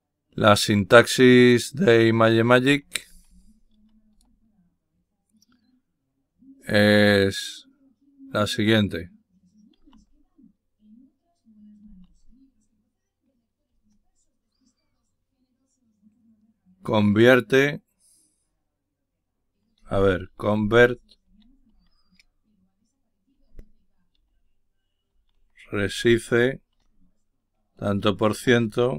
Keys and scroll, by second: 16.2-17.0 typing, 19.5-22.1 typing, 23.4-27.1 typing, 28.1 typing.